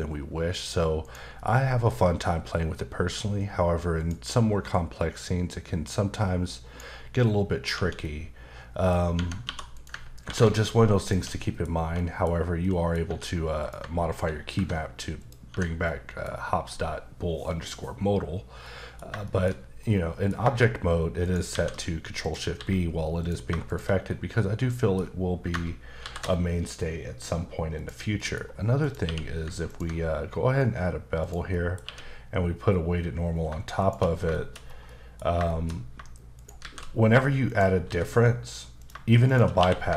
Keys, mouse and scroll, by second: 0.2-1.0 scroll down 1, 1.0 click, 1.4 middle click, 4.0 click, 5.0 click, 7.7 Tab, 8.0 middle click, 9.1 Tab, 9.4 2, 9.7 click, 10.2 ctrl+b, 11.0 click, 11.1 Tab, 11.4 middle click, 11.9 middle click, 12.6 middle click, 13.0 Tab, 13.6 click, 14.5 ctrl+b, 15.2 click, 15.5 Tab, 15.8 middle click, 18.6 middle click, 19.2 shift+middle click, 21.2 shift+right click, 21.5 shift+a, 22.2 click, 22.5 s, 23.2 click, 23.6 shift+click, 24.1 middle click, 26.0 ctrl+shift+b, 27.7 click, 28.2 middle click, 28.8 click, 29.0 q, 29.7 ctrl+click, 31.5-31.8 scroll up 1, 31.8 q, 33.8 shift+click, 34.3 shift+middle click, 34.5 shift+scroll down 2, 34.8 middle click, 35.5 shift+middle click, 36.3 shift+right click, 36.6 shift+a, 37.5 click, 37.8 s, 38.8 click, 39.2 shift+click, 39.4 click, 39.6 q.